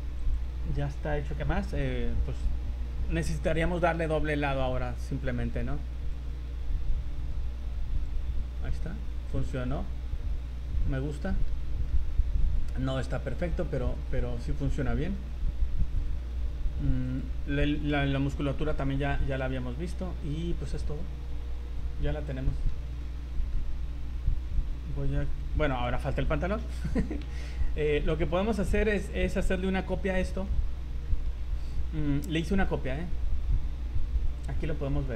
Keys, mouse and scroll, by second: 0.2 click, 1.3-1.8 scroll down 5, 2.1-3.0 scroll up 5, 6.1 click, 8.5-9.6 scroll up 7, 9.7 middle click, 11.9 middle click, 13.1 scroll up 3, 13.5 middle click, 13.8-14.3 scroll up 7, 14.3-14.8 scroll down 15, 15.1 middle click, 17.0 click, 19.2 middle click, 20.2 shift+middle click, 20.6 middle click, 22.5 shift+middle click, 23.1 shift+middle click, 23.3 middle click, 23.7 scroll up 1, 25.1 click, 27.6 shift+middle click, 28.1 scroll down 2, 28.5 middle click, 30.3 shift+d, 31.9 z, 32.6 middle click, 34.4 click.